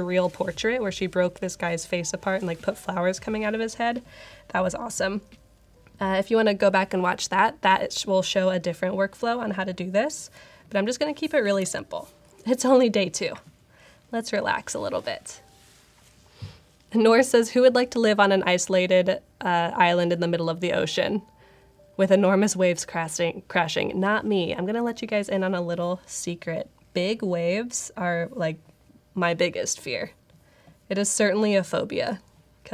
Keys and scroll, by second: 11.5 super+=.